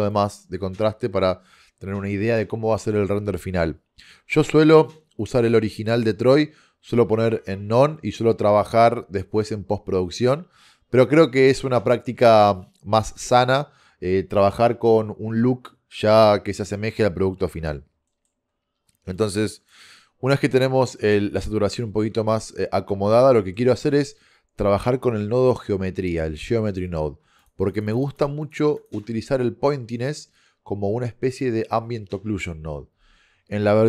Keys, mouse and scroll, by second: 18.1 middle click, 19.2-19.8 drag, 24.0 shift+a, 27.5-33.8 drag.